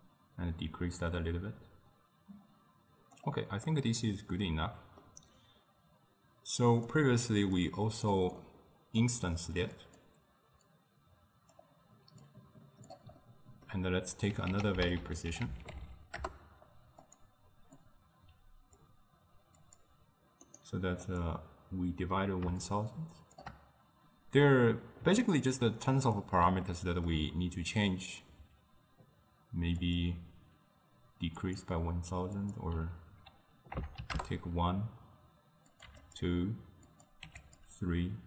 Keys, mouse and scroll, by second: 3.7-7.0 middle drag, 7.0 click, 7.6 click, 8.4-9.9 middle drag, 9.9 click, 10.8-13.3 drag, 13.3-14.6 middle drag, 14.6 ctrl+a, 17.9-20.7 drag, 21.1-24.5 drag, 24.5-29.8 middle drag, 29.9-35.4 drag, 35.7 click, 36.9-37.9 drag.